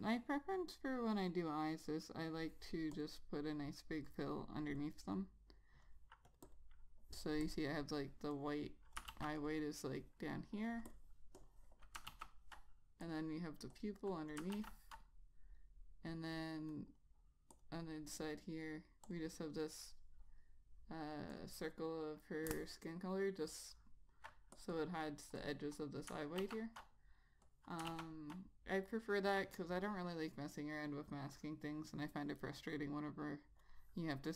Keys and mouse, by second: 0.8 click, 6.7 double click, 7.7 click, 9.2 click, 9.4 ctrl+z, 9.6 click, 15.1 ctrl+z, 17.0 click, 17.2 double click, 17.8 click, 24.8 click, 25.0 double click, 25.7 click, 26.7 ctrl+z, 27.8 click, 28.2 ctrl+z, 32.9 click.